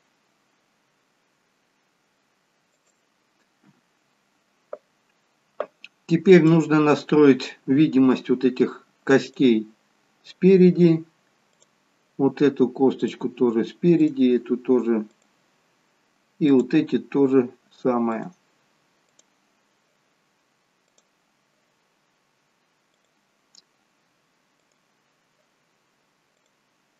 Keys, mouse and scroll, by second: 7.0 click, 7.8-9.3 scroll down 3, 9.3 click, 11.5 click, 15.2 click, 18.1 click, 22.9 click.